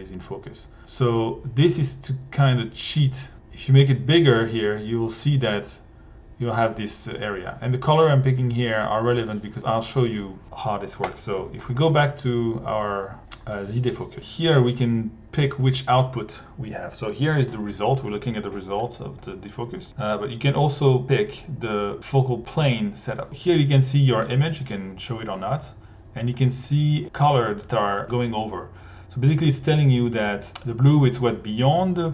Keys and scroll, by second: 11.3 1.